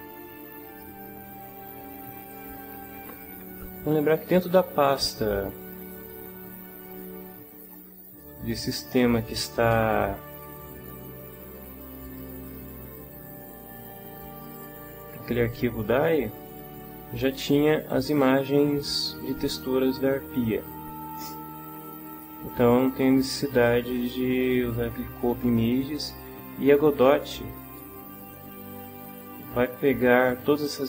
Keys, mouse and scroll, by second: 5.9 alt+Tab, 6.6 alt+Tab, 9.7 ctrl+t, 10.4 ctrl+click, 12.0 click, 14.3 click, 19.2-22.5 drag.